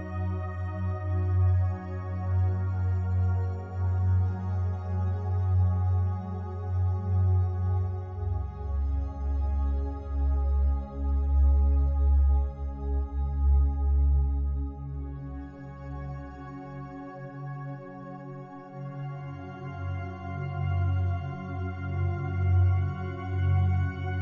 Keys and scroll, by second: 2.4 Delete, 8.4 ctrl+g.